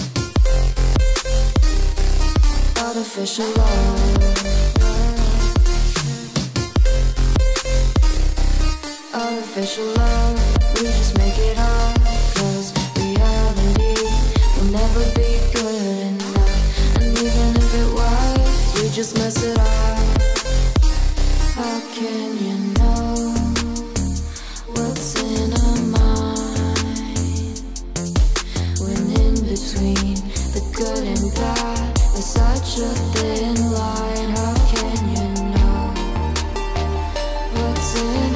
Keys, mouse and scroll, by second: 0.0-3.3 typing, 0.5 Return, 3.5 ctrl+s, 4.6 click, 5.5 click, 5.5 click, 6.3-6.9 scroll down 1, 7.0 click, 8.0-8.3 scroll down 1, 8.3 click, 8.6 Return, 9.0 ctrl+scroll up 1, 9.2 ctrl+scroll down 1, 9.5 ctrl+click, 10.1 ctrl+shift+3, 10.2 ctrl+m, 10.3 ctrl+i, 10.4 ctrl+u, 10.6 ctrl+s, 10.9 ctrl+shift+[, 11.2 ctrl+Return, 11.5 ctrl+f, 11.7 ctrl+n, 11.9 ctrl+Down, 11.9 ctrl+Return, 12.4 ctrl+e, 12.5 ctrl+m, 12.8 ctrl+Right, 13.2 ctrl+s, 13.8 click, 14.5 click, 15.0 Return, 15.1 typing, 15.5 Down, 15.7 Return, 16.4 Right, 16.6 Return, 16.7-19.0 typing, 17.8 Return, 19.9 click, 20.0 scroll down 1, 20.5 click, 21.7-26.8 typing, 23.7 Return, 27.4 Return, 28.1-29.0 typing, 29.1 Down, 29.4-29.8 scroll down 1, 30.0 click, 30.2 Return, 30.4 Return, 30.4 click, 30.6-31.0 scroll down 1, 31.0-32.1 drag, 32.7-38.3 typing, 32.7 click, 36.2 Return, 37.3 Return.